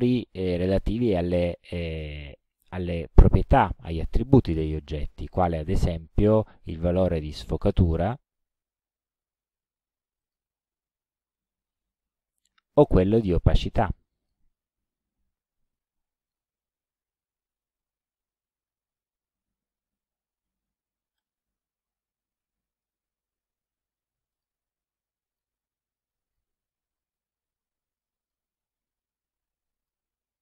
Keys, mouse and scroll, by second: 6.9 click, 8.3 click, 9.5 KP_2, 10.2 click, 13.8 click, 14.7 KP_1, 14.8 KP_0, 16.3 click, 21.2 click, 22.9 click, 24.4 click, 25.3 click, 26.1 click, 27.6 KP_3, 28.1 click, 28.8 KP_5, 29.8 click.